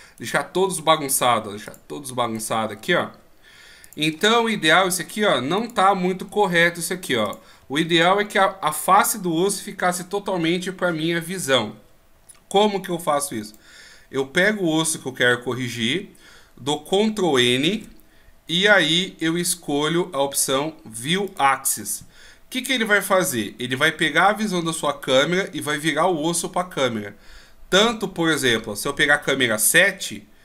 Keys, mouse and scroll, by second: 0.0 ctrl+r, 0.2 right click, 0.6 ctrl+r, 2.3 right click, 2.8 ctrl+r, 5.6 right click, 6.3 ctrl+r, 13.4 right click, 17.7 ctrl+n, 29.3 KP_7.